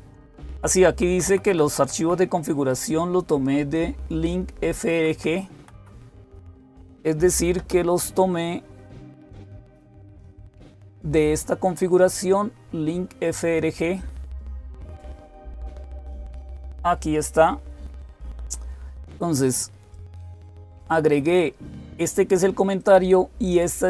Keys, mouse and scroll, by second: 0.7 Right, 0.9 Right, 1.1 Right, 1.5 Right, 1.8 Right, 2.1 Right, 4.4 Right, 4.6 Right, 4.9 Right, 5.4 Page_Down, 5.4 Up, 5.4 Right, 5.4 …, 8.9 click, 19.7 click, 22.6-23.8 drag.